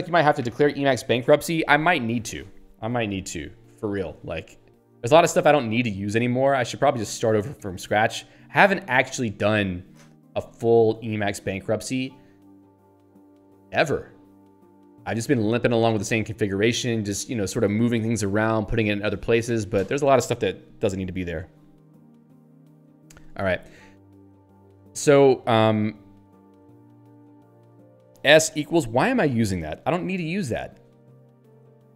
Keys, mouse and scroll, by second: 23.8 click, 27.1-28.0 typing, 29.7 Return, 31.3 q.